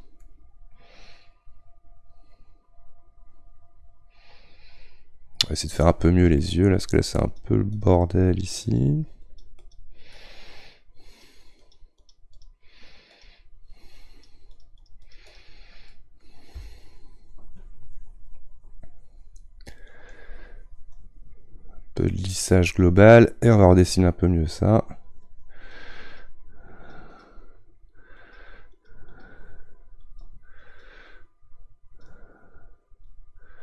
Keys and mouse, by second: 0.2-3.2 middle drag, 6.2-7.2 shift+middle drag, 7.2-10.1 drag, 10.1 middle click, 11.0-15.9 drag, 15.9-16.9 middle drag, 16.9-19.9 shift+drag, 23.5-33.6 drag.